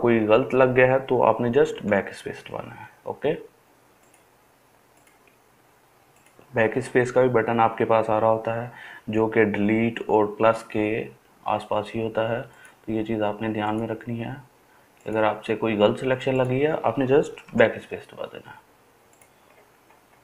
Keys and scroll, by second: 1.8 BackSpace, 17.5-20.2 BackSpace.